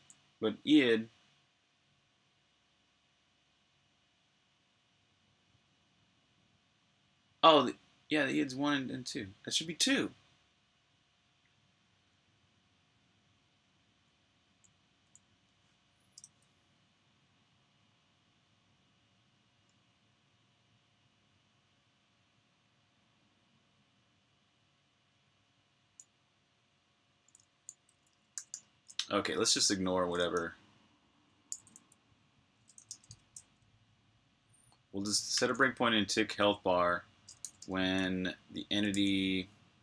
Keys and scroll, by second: 0.0-0.2 typing, 2.0 typing, 14.0-14.4 typing, 17.0 typing, 28.0-28.8 typing, 30.1 k, 31.4 d, 32.6-33.3 typing, 35.2 super+j, 37.1-37.9 typing, 38.8 super+j.